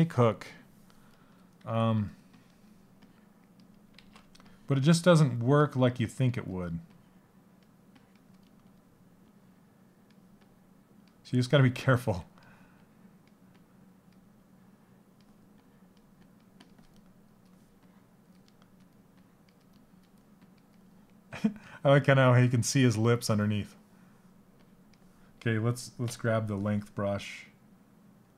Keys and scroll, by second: 3.6 ctrl+z, 11.5 s.